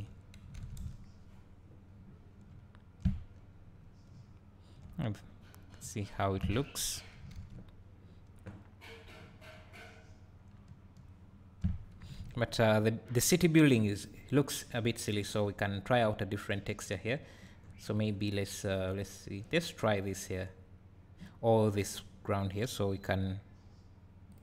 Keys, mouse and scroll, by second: 0.0 scroll down 2, 0.8 KP_0, 2.0 scroll up 1, 2.6 `, 3.8-4.2 scroll up 2, 4.2 `, 5.5-5.9 scroll up 2, 6.3-24.4 drag, 6.7 scroll up 2, 9.9 scroll down 1.